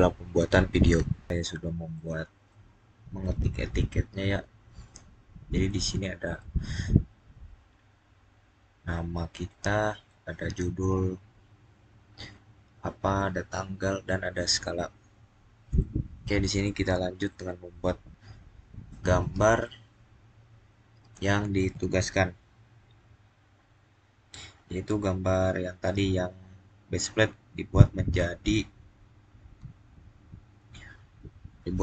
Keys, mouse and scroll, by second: 1.2-5.4 middle drag, 5.5-15.0 middle drag, 15.0 scroll down 2, 15.7-17.4 middle drag, 17.4-17.8 scroll down 2.